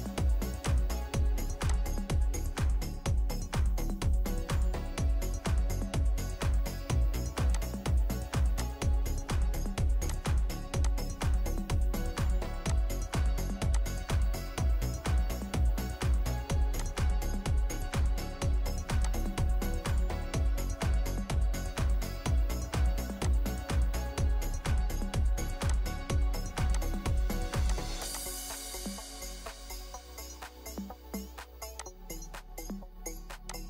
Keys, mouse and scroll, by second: 2.8-4.8 scroll down 1, 11.4-12.6 scroll down 1, 14.9 Escape, 17.3 Escape, 19.4-19.7 scroll up 1, 19.7 scroll down 1, 24.6 Escape, 24.8 Escape, 28.2 double click, 29.0 3, 29.3 Return.